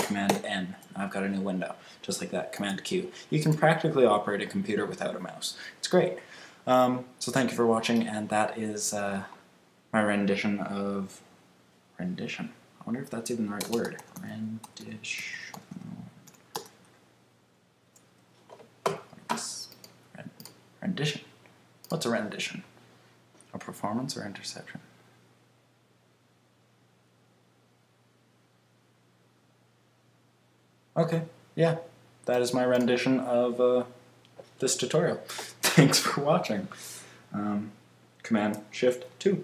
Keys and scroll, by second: 0.2 super+n, 2.5 super+q.